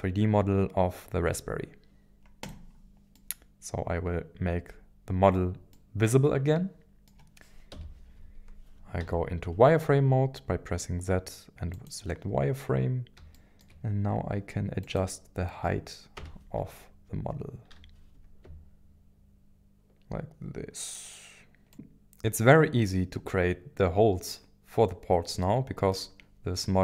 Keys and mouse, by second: 2.4 click, 3.2-5.4 middle drag, 5.7-7.1 middle drag, 7.7 KP_1, 9.0 z, 13.3 shift+middle click, 14.9-16.2 drag, 16.2 g, 17.7 z, 21.7-25.9 middle drag.